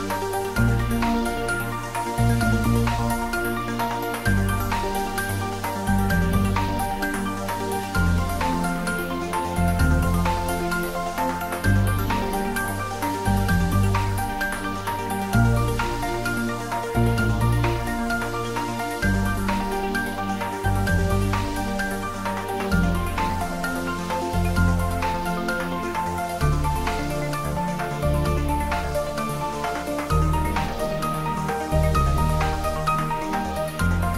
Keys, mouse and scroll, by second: 0.4 middle click, 1.1 shift+right click, 1.4 shift+a, 2.4 click, 2.9 s, 3.2 click, 4.0 ctrl+middle click, 4.8 shift+middle click, 5.1 ctrl+shift+middle click, 5.4 shift+middle click, 5.6-10.8 typing, 6.3 click, 6.9 click, 7.9 click, 8.8 click, 10.1 click, 11.4 click, 11.6 shift+middle click, 12.0 middle click, 12.7 click, 13.4 click, 13.9 shift+middle click, 14.7-15.7 typing, 15.9 click, 17.5 g, 17.7 z, 18.3 click, 18.7 s, 20.6 click, 21.1 Tab, 21.4 click, 21.9 shift+click, 22.2 middle click, 23.4 shift+click, 23.5 middle click, 23.6-24.7 middle drag, 24.7 shift+click, 25.2 ctrl+b, 26.3-27.6 scroll, 30.1 click, 30.4 middle click, 31.2-32.9 ctrl+middle drag, 32.9 ctrl+r, 33.3 click.